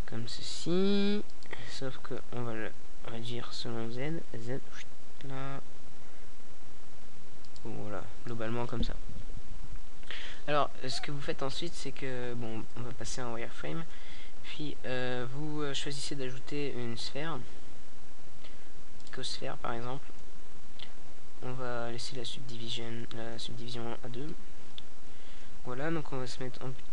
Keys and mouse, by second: 1.3-6.5 drag, 7.3-8.9 middle drag, 9.7 shift+a, 17.6 KP_5, 19.4 KP_3, 22.3-26.2 drag, 26.2-26.9 drag.